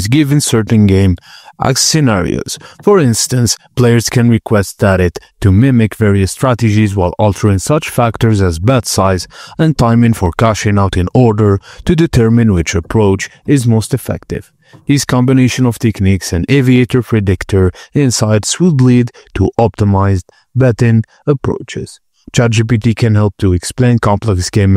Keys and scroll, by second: 0.0-3.0 typing, 8.3-14.0 typing.